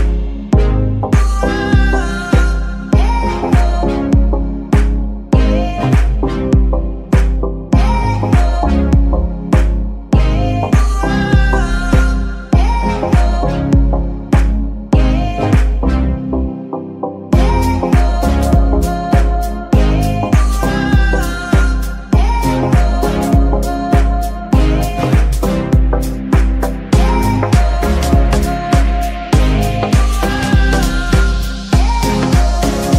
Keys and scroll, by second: 0.0 Escape, 2.8 g, 3.0 Escape, 4.6 g, 4.9 Escape, 8.2 g, 8.4 Escape, 10.5 g, 10.7 Escape, 13.2 g, 13.6 Escape, 15.3 Tab, 17.0 l, 17.8 p, 18.7 Tab, 30.0 g, 30.3 Escape.